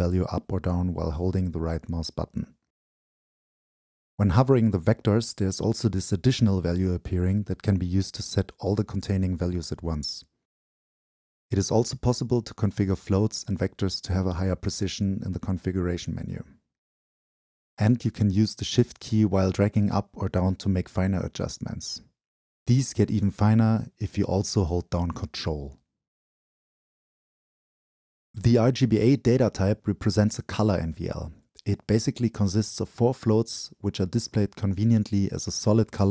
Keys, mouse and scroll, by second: 1.9-2.7 scroll down 2, 2.7 scroll down 1, 2.7-3.5 drag, 4.8-5.6 scroll up 2, 5.7-6.3 scroll up 2, 6.3-7.5 scroll up 1, 7.5 scroll up 1, 15.1-16.1 right drag, 16.1-21.7 drag, 22.1-24.6 shift+right drag, 24.1-24.6 scroll down 2, 26.5-29.6 ctrl+shift+right drag, 28.2-29.1 scroll down 2, 29.1-29.6 scroll down 1, 29.6-32.8 drag, 33.6-35.5 drag, 35.5 shift+middle click.